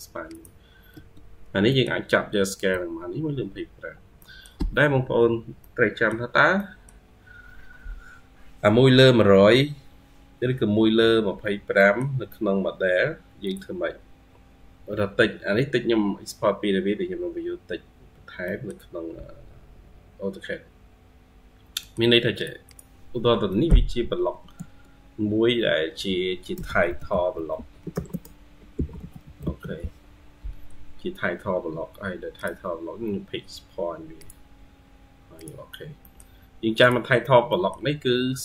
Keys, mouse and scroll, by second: 0.8 Escape, 1.5 middle click, 2.6-3.7 scroll up 5, 3.7-4.0 scroll down 4, 4.0 middle click, 5.1-5.5 scroll down 1, 5.5 middle click, 5.9-6.4 scroll down 1, 6.6 middle click, 10.3-11.3 scroll up 2, 11.3-11.6 scroll down 1, 11.6 middle click, 14.4-15.8 scroll up 2, 17.9 scroll down 3, 18.3 middle click, 19.5-20.2 scroll up 1, 20.2-21.3 scroll up 4, 21.3-21.6 scroll down 1, 21.6 middle click, 22.5 double click, 23.0-23.3 scroll up 2, 23.3 middle click, 23.8 typing, 27.2-30.0 typing, 32.7-33.1 scroll up 2, 33.4 typing, 35.9 middle click, 37.0-37.3 scroll down 2, 37.3 middle click, 38.2-38.4 scroll up 1.